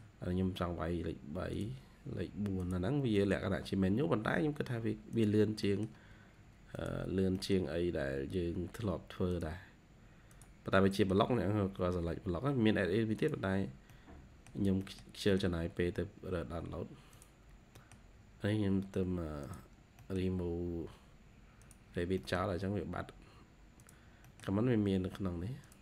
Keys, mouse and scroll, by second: 0.4-1.4 scroll up 1, 2.8 scroll down 1, 3.1 middle click, 3.8-4.5 scroll up 2, 5.6 middle click, 7.0-7.4 scroll down 3, 7.8 scroll up 3, 10.5 scroll down 1, 10.8 middle click, 11.1-11.5 scroll down 1, 11.5-12.1 scroll up 4, 13.4 scroll down 4, 13.8 middle click, 14.7 middle click, 15.7-17.0 scroll up 3, 17.3-17.7 scroll down 1, 17.7 middle click, 18.2-19.4 scroll up 4, 19.6 scroll down 1, 19.9 middle click, 20.5 scroll up 2, 21.8 scroll down 1, 22.1 middle click, 22.7-23.1 scroll up 2, 24.1 middle click.